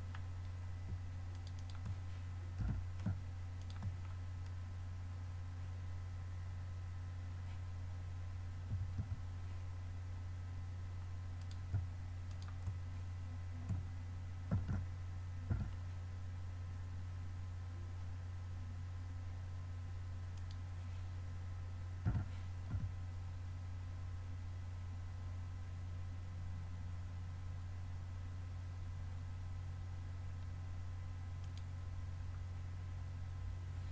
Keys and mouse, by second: 1.4-3.6 drag, 2.6 g, 4.7-8.7 middle drag, 8.7 a, 9.0 a, 11.5-14.2 drag, 14.6 shift+d, 22.1 g.